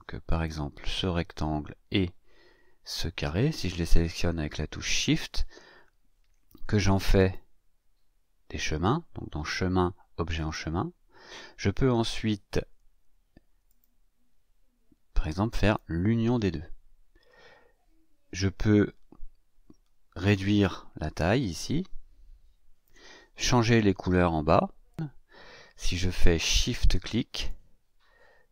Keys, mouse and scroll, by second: 0.2 click, 2.8 shift+click, 7.2 click, 10.3 click, 13.6 click, 15.6 click, 21.5-23.0 ctrl+shift+drag, 24.9 click, 27.3 shift+click.